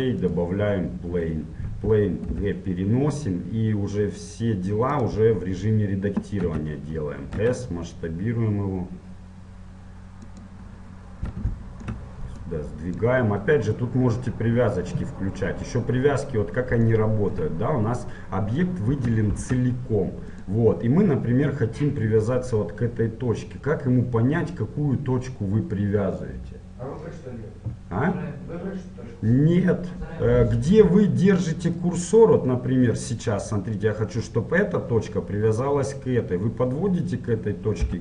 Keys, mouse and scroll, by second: 2.5 g, 6.6 Tab, 7.6 s, 10.9-12.5 middle drag, 10.9 scroll up 1, 12.5-14.5 drag, 14.3-15.5 middle drag, 15.6-18.7 middle drag, 19.3 ctrl+Tab, 30.7 g, 37.9 g.